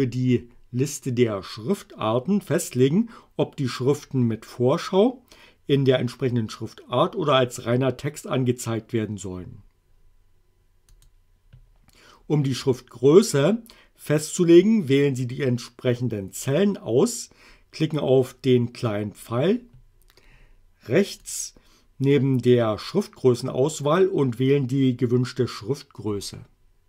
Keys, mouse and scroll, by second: 11.0 click, 21.2 click.